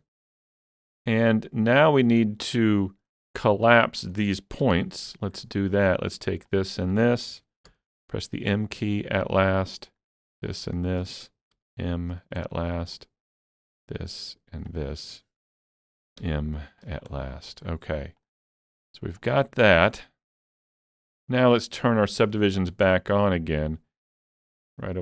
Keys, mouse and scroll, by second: 0.3-1.9 middle drag, 1.9-3.2 shift+middle drag, 3.2 shift+middle click, 3.7 middle click, 4.6 1, 4.7-5.1 scroll up 1, 5.1 middle click, 5.8 click, 6.5 shift+click, 7.7 m, 8.5 shift+click, 10.5 shift+click, 11.5 m, 12.1 shift+click, 12.5 middle click, 13.6 click, 14.7 shift+click, 16.2 m, 16.8 shift+click, 17.2-20.7 middle drag, 18.2 click, 19.2-22.2 drag, 20.7-21.0 scroll down 1, 21.0-23.0 middle drag, 22.2-22.7 scroll up 1, 22.7 Tab, 23.0-23.4 scroll down 2, 23.4 middle click.